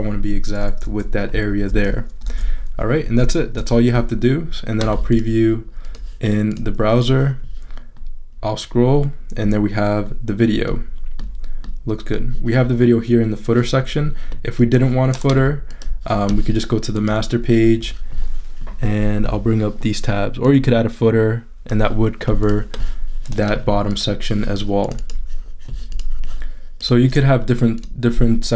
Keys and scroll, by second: 0.8 super+-, 2.2 super+-, 3.5 super+=.